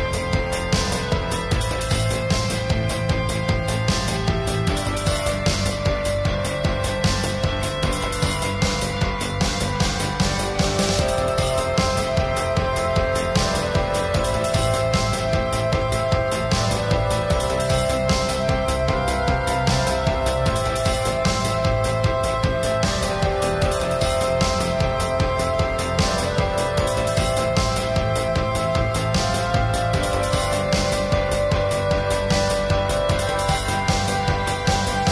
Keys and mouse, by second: 0.0 middle click, 0.6-1.8 drag, 1.8-2.5 middle drag, 2.3-3.4 drag, 3.4 middle click, 4.0-5.1 drag, 4.8 ctrl+s, 5.1-5.5 middle drag, 5.7 middle drag, 6.0-7.6 drag, 7.9-8.4 drag, 8.4 ctrl+s, 8.7 click, 11.1 click, 12.0 click, 12.3 middle click, 12.6-12.9 ], 12.9-14.5 drag, 14.5-14.8 middle drag, 15.0 middle click, 15.8-17.1 drag, 17.1 middle click, 18.0-19.0 drag, 19.2 click, 19.6 ], 20.5 KP_5, 21.3 ], 22.4 middle click, 23.3-24.3 drag, 24.4 middle click, 24.7-25.2 drag, 25.2-29.0 middle drag, 29.0 ctrl+s, 29.1-29.8 middle drag, 29.8 [, 30.0-30.3 [, 30.4 ctrl+KP_Add, 31.5-32.6 drag, 32.6-33.0 middle drag, 33.1 click, 33.6-34.0 middle drag, 34.1 middle click, 34.3 click, 34.6-35.0 middle drag.